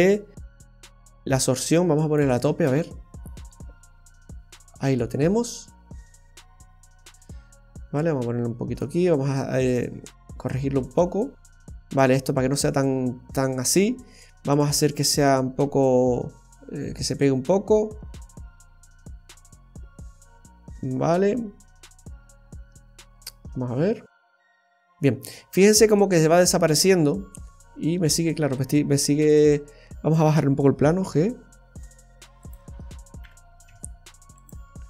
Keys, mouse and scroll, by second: 0.1 scroll down 2, 1.7 click, 2.5 space, 8.0 click, 9.4 click, 15.2 click, 26.7-27.2 scroll down 3, 27.0 middle click, 29.4 right click, 32.4 click.